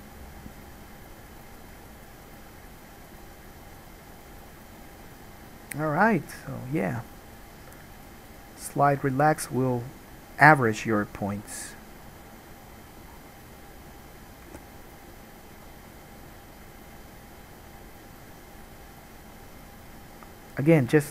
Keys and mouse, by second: 0.7-3.5 drag, 3.5-7.0 middle drag, 7.0-9.8 drag, 9.8-17.7 middle drag, 14.7 g, 19.8-21.1 middle drag.